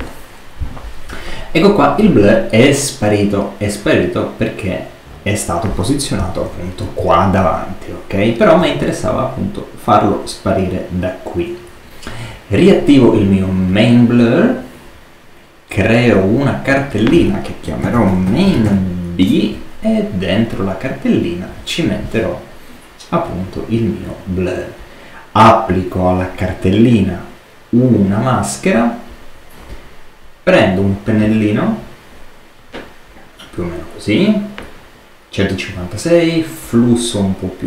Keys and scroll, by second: 6.2 super++, 6.9 super+space, 17.5-19.0 typing, 19.1 shift+Return.